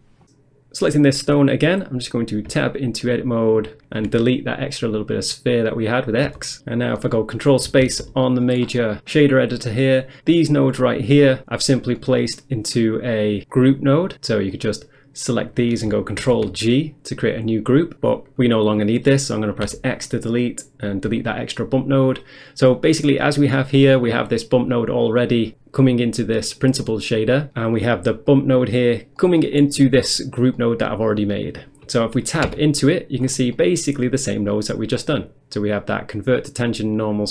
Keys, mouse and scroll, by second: 1.8-2.5 scroll up 1, 2.5 Tab, 4.1 x, 4.8 click, 6.3 Tab, 7.9 ctrl+space, 8.7-9.5 scroll down 1, 9.5 scroll down 1, 10.8 click, 11.7-12.0 scroll down 1, 12.0 middle click, 12.6 middle click, 13.6 click, 14.6 click, 15.5 click, 16.3 ctrl+g, 18.1 click, 18.6 click, 19.7 x, 20.5 click, 21.2 x, 22.7 click, 23.5 middle click, 23.9 middle click, 27.5 scroll down 1, 27.7 middle click, 28.3 click, 29.4 middle click, 29.6 scroll up 1, 30.1 click, 30.6 middle click, 30.9 middle click, 31.1-32.1 scroll up 1, 32.5 Tab, 33.3-33.6 scroll down 1, 33.6 middle click, 34.3 middle click, 37.1 click.